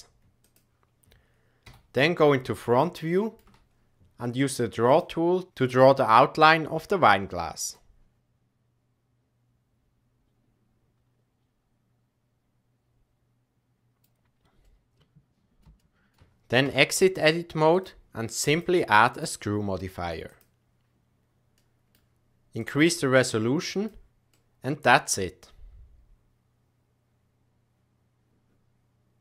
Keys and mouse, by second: 1.6 KP_1, 2.5 shift+middle click, 7.7-14.0 drag, 14.6-15.6 middle drag, 15.8 shift+middle click, 16.6 Tab, 17.7 click, 18.5 click, 19.2-20.6 drag, 21.5 middle click, 22.6-23.8 drag, 24.3-29.2 middle drag.